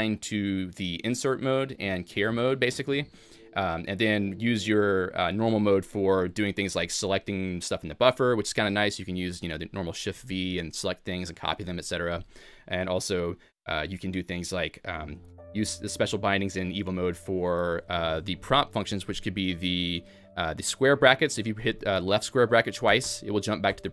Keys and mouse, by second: 5.8 Escape, 6.5-7.3 typing, 8.2 Escape, 8.6 k, 10.1 shift+v, 10.3 k, 11.8 Escape, 12.2 j, 15.2-19.9 shift+g, 16.9 shift+a, 17.5 Escape.